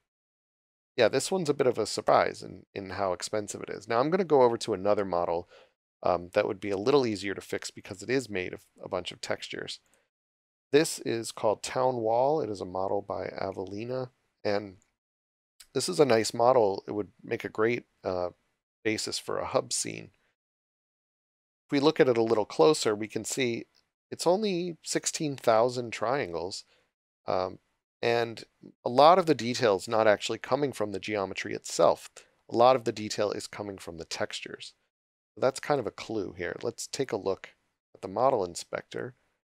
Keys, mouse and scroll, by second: 0.4 click, 7.2 click, 14.8 click, 20.4-21.3 scroll up 1, 21.8 click, 23.5-24.3 scroll down 1, 26.2 scroll up 1, 27.0 click, 38.2 click.